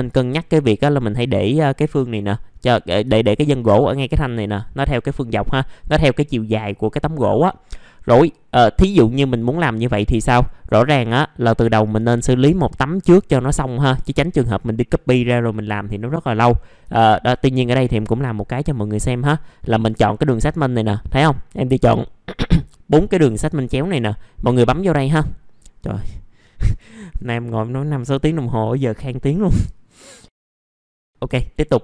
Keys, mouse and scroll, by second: 2.7 middle click, 3.1 alt+middle click, 4.9-6.7 scroll down 1, 7.1-9.6 scroll up 1, 9.6 middle click, 9.7-10.3 scroll down 1, 10.4 alt+middle click, 11.1-11.9 scroll up 1, 12.4 ctrl+click, 13.6 ctrl+click, 14.0-15.6 scroll down 1, 15.6-16.0 scroll up 1, 16.0 middle click, 16.5 scroll up 1, 16.9 alt+middle click, 24.6 click, 29.5 alt+middle click, 30.3-30.8 scroll up 1, 30.8 middle click, 31.0 alt+middle click.